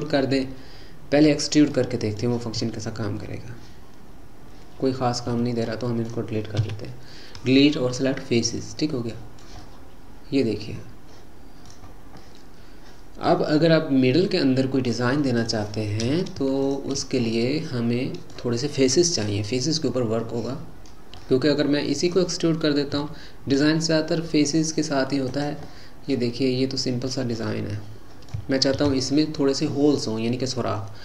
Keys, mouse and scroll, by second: 1.8 middle click, 2.6 e, 5.8 middle click, 6.6 Delete, 8.8-11.9 middle drag, 11.9-12.2 scroll down 1, 12.2-15.3 middle drag, 15.4 click, 16.6 shift+click, 17.2-20.4 middle drag, 21.2-23.0 middle drag, 23.0 e, 25.7-28.8 middle drag, 28.8 ctrl+z, 29.2-31.0 middle drag.